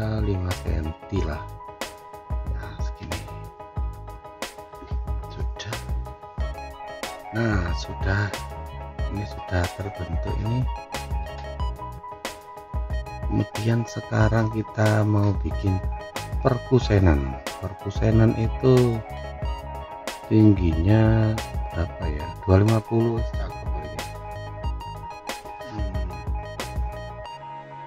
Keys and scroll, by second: 3.3 5, 4.1 Return, 10.0 F4.